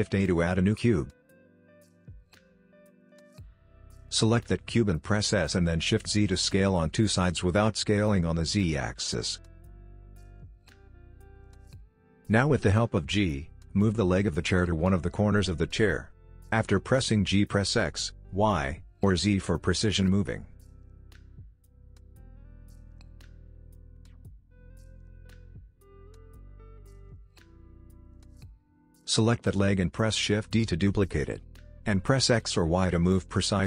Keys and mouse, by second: 3.8 s, 9.6 KP_7, 11.6 click, 16.1 g, 19.4 g, 23.8 middle click, 24.2 middle click, 24.4 middle click, 24.8 g, 25.6 KP_1, 25.9 g, 27.2 middle click, 27.8 shift+d.